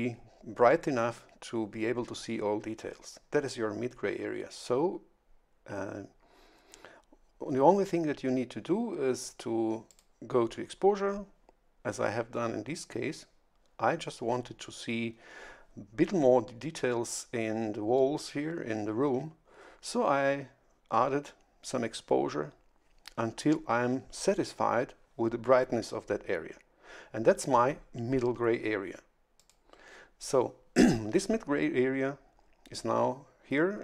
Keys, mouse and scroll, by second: 9.8 click, 29.3 click.